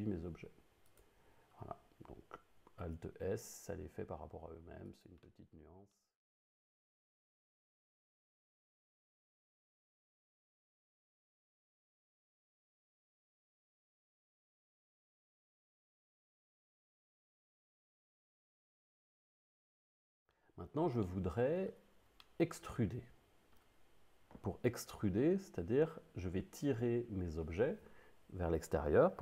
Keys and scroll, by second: 2.8 alt+s.